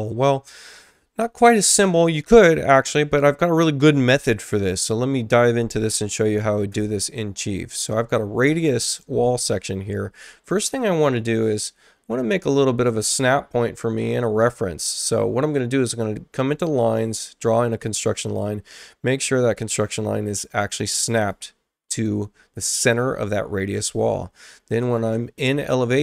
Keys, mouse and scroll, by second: 6.7 alt+Tab, 11.4 click, 16.8 click, 18.4-19.5 drag, 20.1 click, 21.1 click, 22.0 click, 24.8 click.